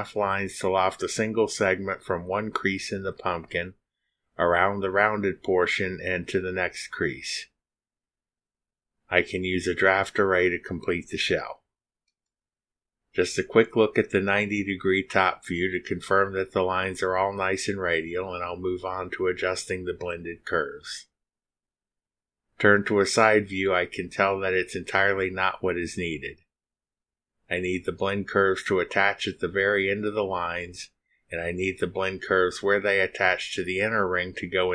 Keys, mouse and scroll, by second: 14.4 click, 19.6-22.3 drag, 22.5 click, 29.9 click, 31.6 click, 32.2 drag, 33.0 space.